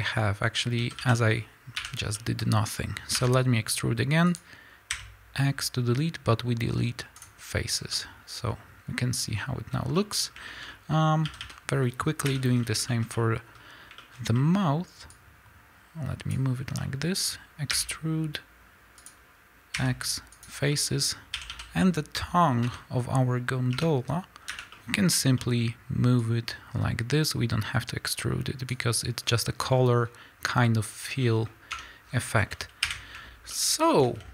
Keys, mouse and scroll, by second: 0.4-0.7 scroll up 1, 0.7 a, 1.7 l, 1.9 scroll down 1, 2.6-3.3 scroll up 1, 3.3 e, 4.5 click, 4.9 x, 7.7 scroll down 2, 7.8-15.2 middle drag, 10.2 scroll up 2, 10.8-11.2 scroll up 2, 11.2 a, 12.2 l, 12.4-12.8 scroll down 2, 13.6-14.1 scroll up 3, 15.2-16.7 drag, 16.7-19.0 middle drag, 17.8 e, 19.0 click, 19.7 x, 20.6-26.1 middle drag, 21.3 a, 22.5 l, 23.8 2, 24.4 l, 25.5-26.1 scroll up 2, 26.1-29.7 drag, 29.5 scroll down 2, 29.7-34.3 middle drag, 30.7-31.1 scroll down 1, 31.8 Tab, 31.9 scroll down 1, 32.7 KP_1.